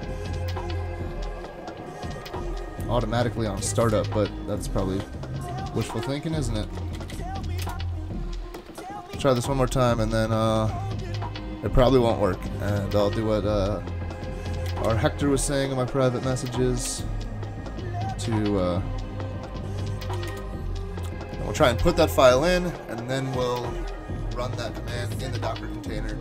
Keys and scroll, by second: 2.3 super+Tab, 3.9 super+Tab, 5.9 ctrl+c, 6.6 super+k, 7.1 Up, 7.6 Return, 14.6 Up, 14.8 Up, 16.9 Return, 18.5 super+k, 20.3 Return.